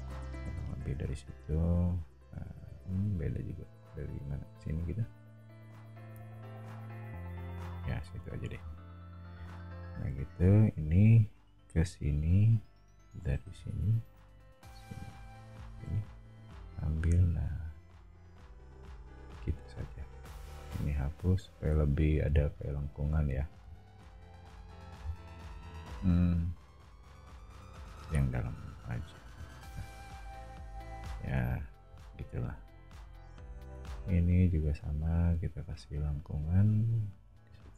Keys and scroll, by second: 2.8 Escape, 8.1 e, 9.7 a, 12.8 Escape, 19.8 e, 31.0 o, 33.6 a.